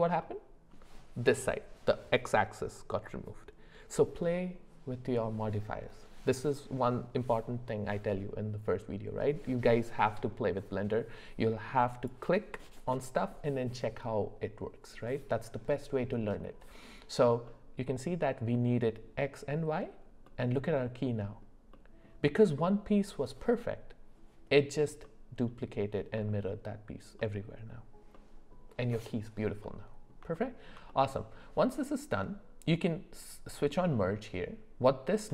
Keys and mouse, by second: 0.2 middle click, 11.9 click, 17.5-18.6 middle drag, 20.3-21.4 middle drag, 21.7-22.1 middle drag, 25.0-25.4 middle drag, 26.2 middle drag, 27.2 middle click, 28.1 middle click, 29.6 middle click, 30.3 shift+middle click, 30.9 middle click.